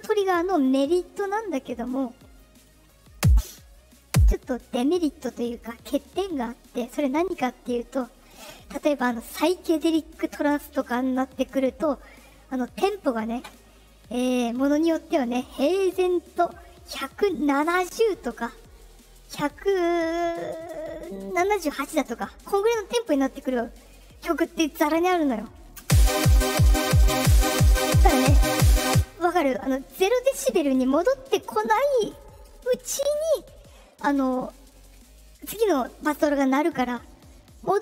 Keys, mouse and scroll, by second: 0.6 right click, 1.9 click, 3.1-4.3 drag, 4.8 right click, 8.1 click, 15.5-21.6 drag, 25.7 space, 28.8 space, 32.8 click.